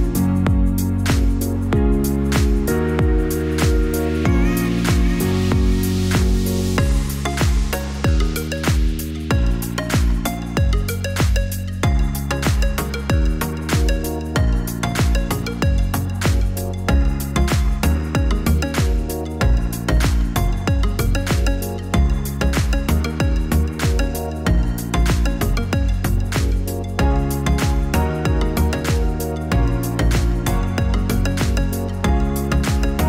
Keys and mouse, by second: 0.6 click, 2.8 Tab, 7.5 click, 9.1 click, 15.9 click, 18.5-23.3 drag.